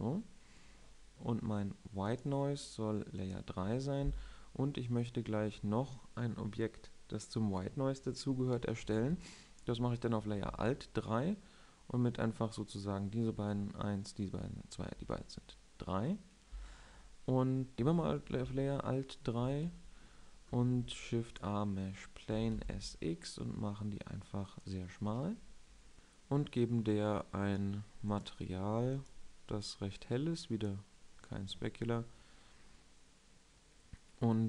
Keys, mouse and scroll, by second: 3.0-17.6 drag, 18.6 alt+3, 20.3 shift+c, 21.4 shift+a, 23.2 s, 25.5-25.9 drag.